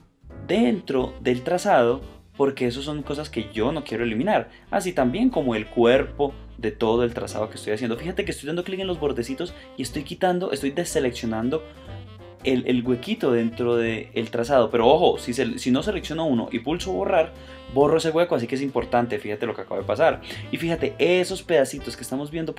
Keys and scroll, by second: 15.6 super+z, 18.8 shift+space, 20.0 shift+space.